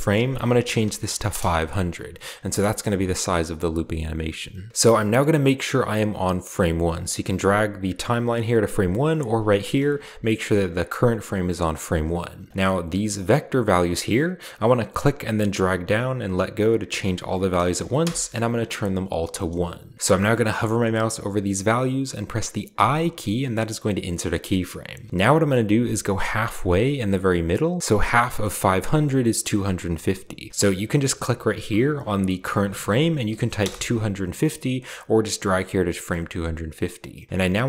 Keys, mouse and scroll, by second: 0.6 typing, 1.2 Return, 2.1-2.8 scroll down 1, 2.6-3.3 middle drag, 2.8 scroll up 1, 3.3-3.8 scroll up 1, 6.1-7.2 drag, 7.8 click, 8.4-9.5 drag, 9.9 click, 10.0 1, 10.7 click, 11.8 middle click, 11.8-12.5 scroll up 1, 12.5 click, 14.9-16.2 drag, 17.7 1, 18.0 Return, 20.2 middle click, 22.7 i, 26.6-27.4 scroll up 1, 27.4 scroll down 1, 27.4 scroll up 1, 27.5 scroll down 1, 27.5 scroll up 1, 28.1 middle click, 28.9 middle click, 31.3 click, 32.5-33.2 typing, 33.5 Return, 34.6-35.5 scroll up 1, 35.9 middle click.